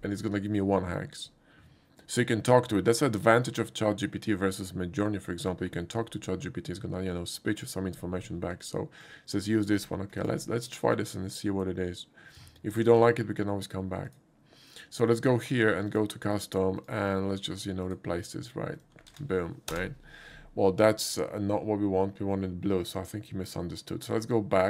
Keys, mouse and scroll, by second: 9.0 click, 10.2 ctrl+click, 10.8 ctrl+click, 11.6 ctrl+click, 12.7 ctrl+c, 14.1 click, 15.9 click, 16.8 click, 17.8 click, 18.8 click, 19.2 ctrl+v, 19.7 Return.